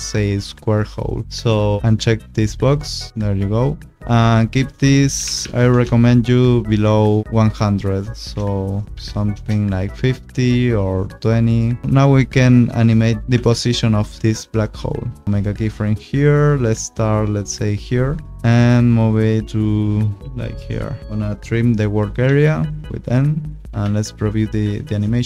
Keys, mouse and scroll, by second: 0.7 scroll, 1.8 click, 3.1-4.0 scroll, 4.0 click, 5.1 1, 5.2 0, 5.7 Return, 6.6 click, 7.8 click, 8.9 5, 9.0 0, 9.3 Return, 11.0 click, 11.8 p, 12.7 click, 13.3 p, 15.0 click, 22.2 n, 23.5 click, 23.7 space.